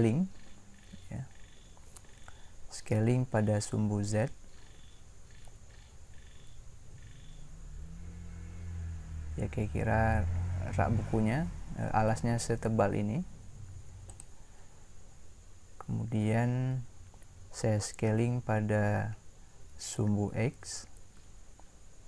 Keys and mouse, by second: 0.5 s, 21.1 s.